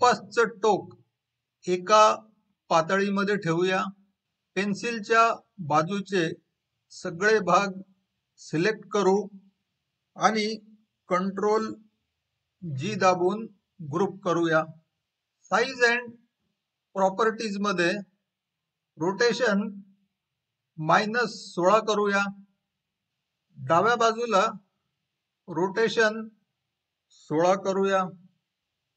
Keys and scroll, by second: 13.6 ctrl+g.